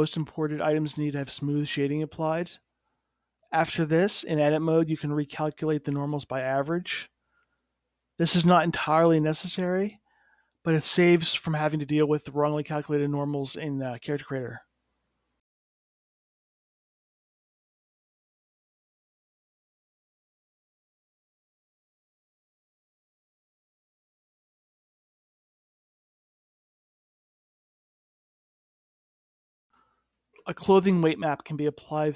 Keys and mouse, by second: 4.2 F3, 5.0 o, 6.9 Tab, 8.3 F3, 12.1 Tab, 12.8-13.9 middle drag, 13.5 KP_1, 13.9 click, 14.8-15.9 drag, 16.2 click, 23.0 middle click, 24.8-26.0 drag, 26.0-28.3 middle drag, 28.5-30.8 middle drag, 31.1-32.1 drag.